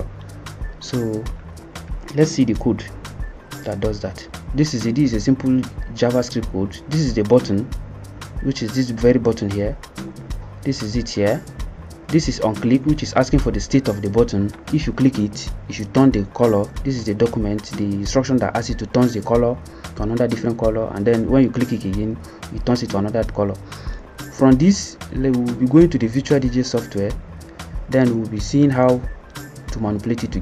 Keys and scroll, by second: 8.3 F1.